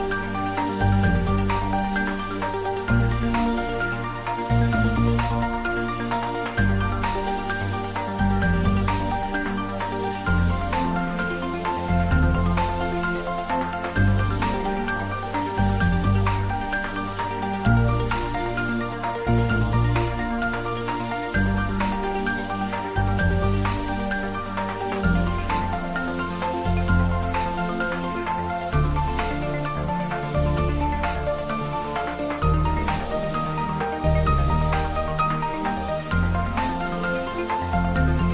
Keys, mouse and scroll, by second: 0.8 s, 1.6 click, 3.4-4.6 ctrl+middle drag, 4.6 g, 5.7-6.5 typing, 6.8 click, 7.6 ctrl+z, 11.0 click, 13.6 click, 14.1-14.8 ctrl+middle drag, 16.0 g, 18.0 click, 21.0 click, 21.8 ctrl+middle click, 22.6 shift+middle click, 23.0-24.3 ctrl+middle drag, 24.3 click, 25.6-26.8 middle drag, 26.8 ctrl+middle click, 27.2 middle click, 27.7 middle click, 28.1 ctrl+middle click, 28.7-31.3 shift+middle drag, 34.6 click, 35.1-36.6 shift+middle drag, 36.6 shift+right click, 37.4 click.